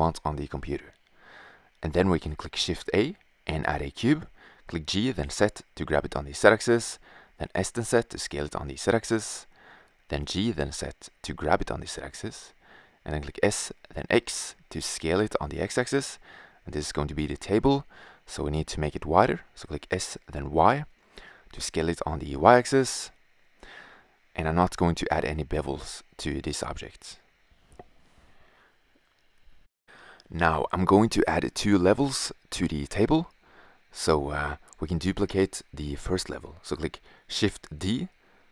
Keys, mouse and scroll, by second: 0.1-1.4 middle drag, 1.5 shift+a, 3.5 g, 6.3 s, 9.5 g, 11.3-11.7 drag, 12.6 s, 18.8 s, 23.1 middle drag, 23.3 click, 23.4-24.2 middle drag, 26.0 s, 27.9 click, 29.6-30.4 right drag, 30.4 g, 34.2-34.9 middle drag.